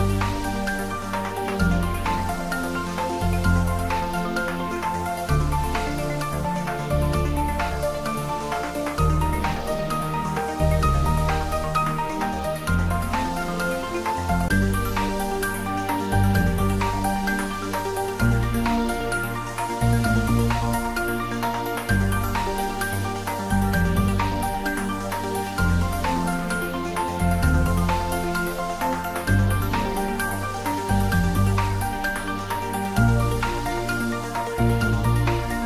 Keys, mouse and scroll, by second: 0.1 middle click, 1.2 scroll up 1, 4.2-9.1 drag, 9.3 right click, 10.0-16.4 drag, 20.8-26.0 drag, 27.4 click, 27.6-33.4 right drag.